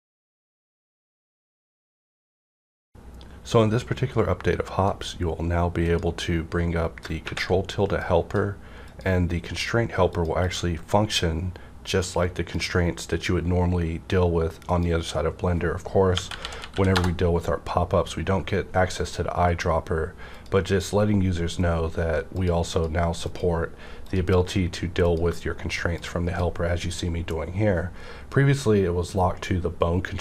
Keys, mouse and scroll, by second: 7.0 shift+middle click, 7.2 ctrl+`, 7.9-10.1 drag, 10.4 click, 11.9-16.1 drag, 16.1-16.7 typing, 16.9 Return, 20.3 Return, 20.3 click, 22.3-28.8 drag.